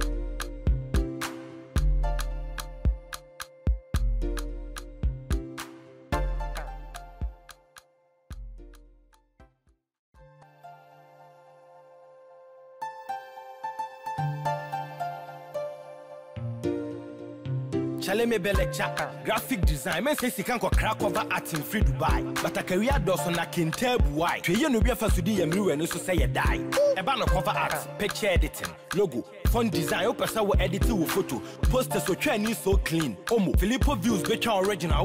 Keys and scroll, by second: 0.9 ctrl+t, 23.1 shift+Up, 24.6 Down.